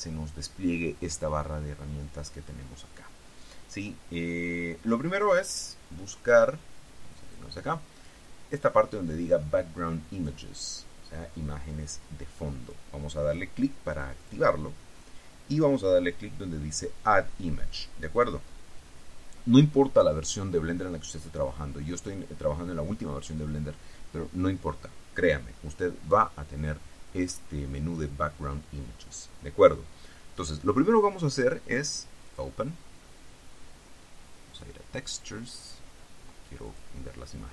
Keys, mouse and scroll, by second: 7.4 click, 8.2 scroll down 1, 12.8 click, 14.4 click, 15.0-15.5 scroll down 1, 18.3 click, 18.8-19.3 scroll down 2, 32.4 click, 34.7 click, 36.8 click.